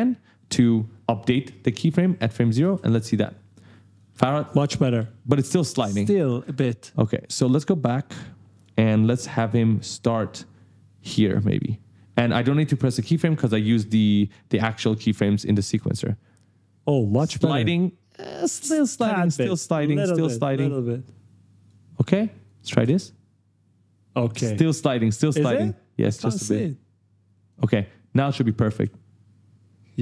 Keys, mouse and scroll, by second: 2.0 click, 2.4 space, 3.6-4.8 typing, 3.7 right click, 6.2 space, 7.0 click, 8.3 click, 9.5 click, 14.5 click, 15.4 space, 18.2 space, 18.8 click, 19.8 click, 20.5 click, 22.2 click, 22.6 space, 24.1 space, 25.3 click, 26.2 click, 27.9 click, 28.5 space, 29.7-30.0 typing, 29.9 right click.